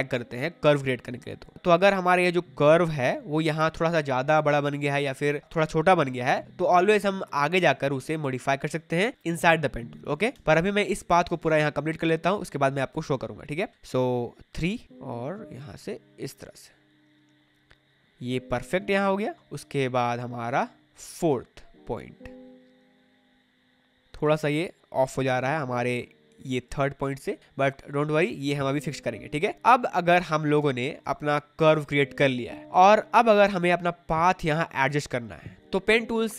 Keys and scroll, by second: 10.3 space, 18.7 space, 29.4 space, 34.1 space.